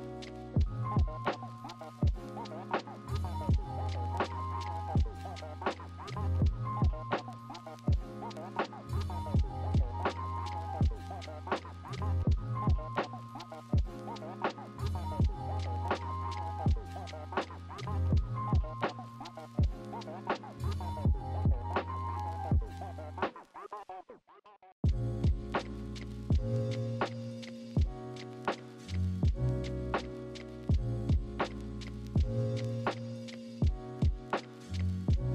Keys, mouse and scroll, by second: 0.3 ctrl+z, 1.6 r, 1.8 ctrl+shift+n, 11.3 ctrl+z, 11.9 ctrl+z, 13.1 ctrl+z, 16.4 i, 17.0 b, 29.7 right click, 30.3 b, 32.8 ctrl+z.